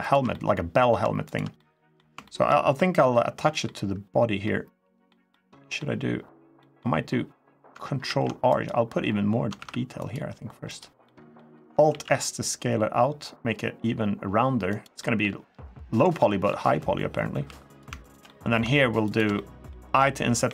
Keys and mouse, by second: 0.1 middle click, 1.3 middle click, 2.0 shift+middle click, 2.5 middle click, 4.2 middle click, 5.1 middle click, 6.4 middle click, 7.8 ctrl+r, 10.3 ctrl+r, 10.8 click, 11.7 alt+s, 14.4 click, 14.7 middle click, 15.9 middle click, 17.2 3, 17.4 click, 17.8 shift+click, 18.0 middle click, 18.8 shift+click, 18.9 shift+middle click, 19.1 middle click, 20.2 i.